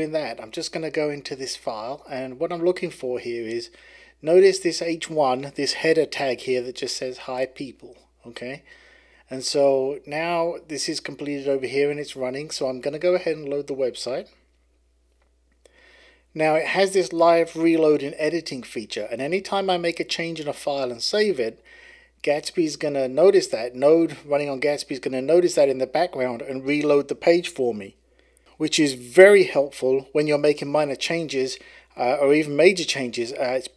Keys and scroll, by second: 13.3 Right, 14.1 Return, 19.4 Left, 19.7 Left.